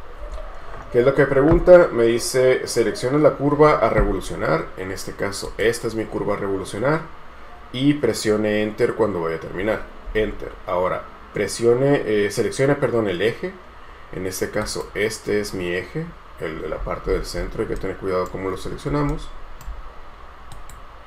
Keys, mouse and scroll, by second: 10.2 space, 16.9 scroll up 1, 17.9 right click, 19.3 shift+right click.